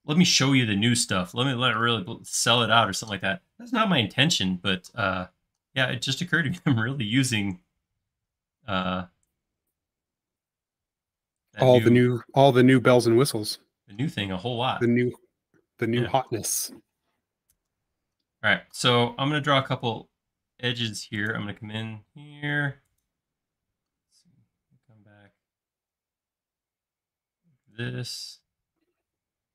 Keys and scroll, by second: 11.8 l, 12.8 space, 13.9 l, 20.7 space, 21.7 l.